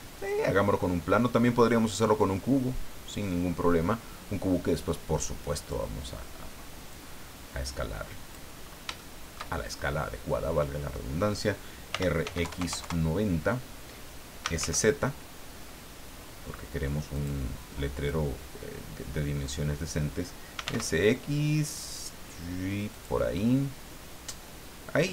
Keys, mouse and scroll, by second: 0.2 click, 0.7-1.0 scroll down 2, 3.2-5.9 drag, 6.9-8.5 drag, 8.6 scroll up 1, 9.0 shift+middle click, 9.8-11.1 shift+middle drag, 11.9 r, 12.2 x, 12.4 KP_9, 12.6 KP_0, 12.8 KP_Enter, 14.1-15.1 typing, 17.1 click, 18.0-19.7 drag, 20.3-21.1 typing, 22.9 click.